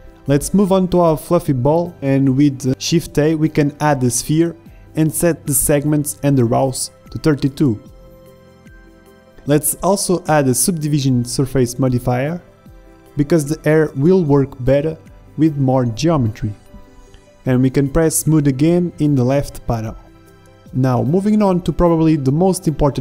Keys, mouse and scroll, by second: 0.5-1.9 middle drag, 2.1 shift+a, 6.8 click, 7.6-9.4 drag, 9.4 middle click, 9.5 click, 9.9 click, 9.9 s, 10.1 s, 11.0-13.6 drag, 15.2-21.9 drag.